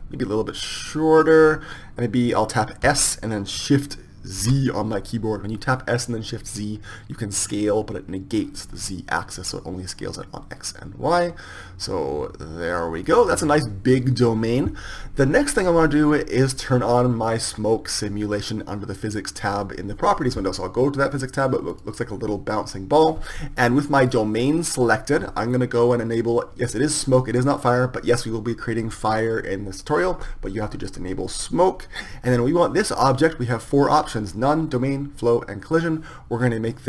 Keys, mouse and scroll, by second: 1.5-3.9 drag, 2.5 Tab, 3.9 s, 19.7-23.5 middle drag, 23.5 click, 31.8-36.3 drag.